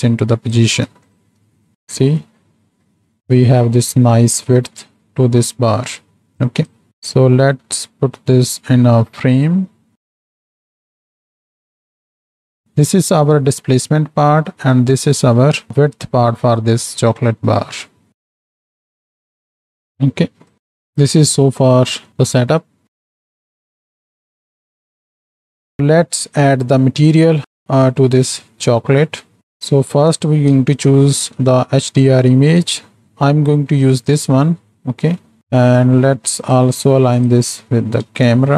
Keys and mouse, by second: 1.1 ctrl+shift+click, 1.7 middle click, 2.8-3.6 middle drag, 4.2-4.9 middle drag, 6.4 click, 6.9-8.6 drag, 9.1-10.3 drag, 10.4 ctrl+j, 10.5 click, 11.0 click, 11.1 right click, 11.4 click, 11.7 click, 12.0 click, 12.1 middle click, 12.1 x, 12.2 right click, 12.5 right click, 12.7 right click, 14.1 middle click, 14.7-15.6 right drag, 16.6-17.0 right drag, 17.5-18.6 right drag, 18.8 right click, 19.6 right click, 20.2 ctrl+j, 20.2 click, 20.6 ctrl+space, 20.6 middle click, 21.8 middle click, 22.1 click, 22.6 click, 22.9 ctrl+space, 23.5-24.9 drag, 25.9 middle click, 27.6 middle click, 28.1 z, 28.9 middle click, 30.5 n, 32.5 click, 33.1 click, 35.4 n, 36.4 click, 38.0 KP_0.